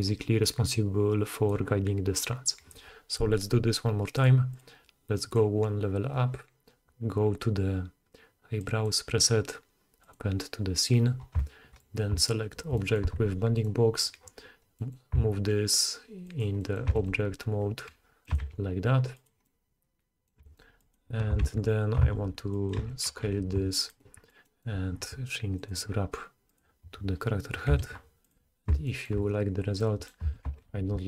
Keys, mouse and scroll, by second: 4.6-5.2 middle drag, 5.2-16.3 drag, 13.5 middle click, 13.5 right click, 15.2 s, 16.5-16.9 middle drag, 16.9 g, 18.3 g, 19.4-20.4 middle drag, 20.4 g, 21.6 ctrl+z, 21.6-22.8 ctrl+middle drag, 22.0 s, 22.8 g, 22.9 middle click, 23.4-25.6 drag, 25.7-26.5 drag, 27.7 e, 28.3-29.9 drag, 30.2-31.0 drag, 30.2 g.